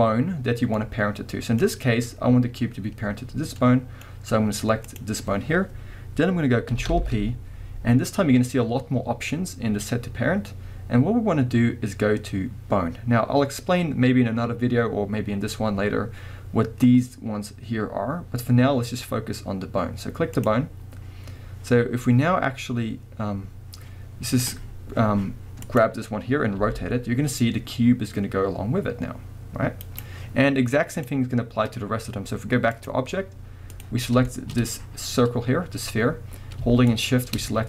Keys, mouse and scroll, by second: 0.8-4.9 middle drag, 4.9 click, 6.9 ctrl+p, 25.6 click, 26.6 r, 30.0 right click, 30.9-33.9 drag, 34.0 scroll down 1, 34.3-36.9 shift+middle drag, 34.5 scroll up 1, 36.9 shift+click.